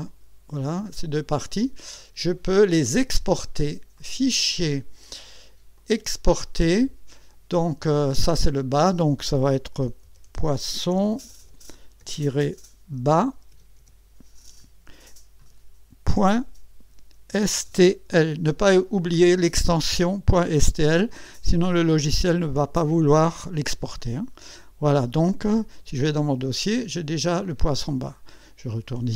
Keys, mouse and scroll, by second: 0.0 click, 1.0 click, 1.5 click, 3.9 click, 5.7 click, 8.3 click, 9.5-11.9 typing, 12.9 b, 13.5 a, 13.8 s, 16.1-18.6 typing, 24.0 click, 26.0 click, 28.7 click.